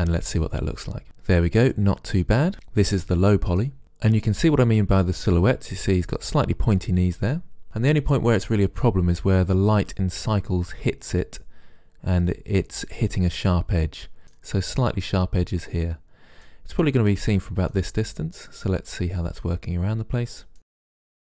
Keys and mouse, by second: 0.0 shift+space, 1.8-3.7 middle drag, 3.8-7.4 middle drag, 7.6-14.2 middle drag, 15.9 middle click.